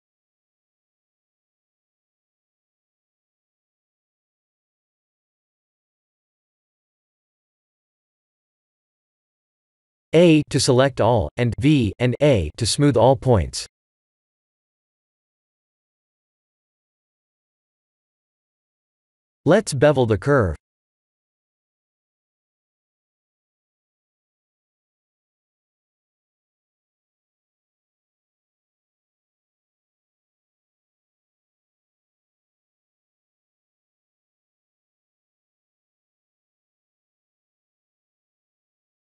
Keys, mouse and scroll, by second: 0.5 shift+middle click, 2.5 click, 3.1 g, 4.7 click, 5.2 g, 6.8 click, 6.9 g, 8.3 click, 8.6 g, 9.7 click, 10.0 g, 11.1 a, 11.6 v, 12.2 Tab, 13.3 middle click, 15.6-16.4 scroll up 4, 16.2 middle click, 16.4 middle click, 16.5 middle click, 16.9 shift+middle click, 17.1 shift+middle click, 19.7 click, 20.7 click, 21.9 shift+click, 23.7 shift+click, 24.0 click, 24.4 middle click, 24.6 middle click, 24.8 middle click, 24.8 shift+z, 25.9 middle click, 26.9 scroll up 3, 27.6 shift+middle click, 28.3 scroll up 2, 29.0 shift+middle click, 29.9 click, 30.3 middle click, 30.6 shift+middle click, 30.7 Tab, 31.6 click, 32.6 g, 37.2 middle click, 38.9-39.0 scroll down 6.